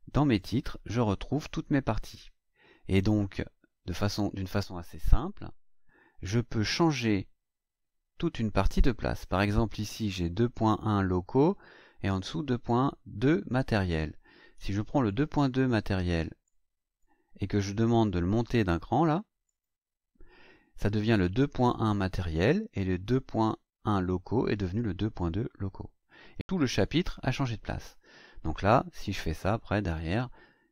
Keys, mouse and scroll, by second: 0.3 click, 1.9 click, 4.9-6.4 scroll down 6, 6.6 scroll down 1, 7.3-7.6 scroll down 2, 8.1-8.5 scroll down 2, 8.6 scroll up 2, 9.5-9.9 scroll up 2, 10.1 scroll up 2, 11.5-12.1 scroll down 4, 15.0 click, 16.4 click, 19.4 click, 24.5 scroll down 2, 27.5-27.9 scroll up 2, 28.1-29.3 scroll up 6.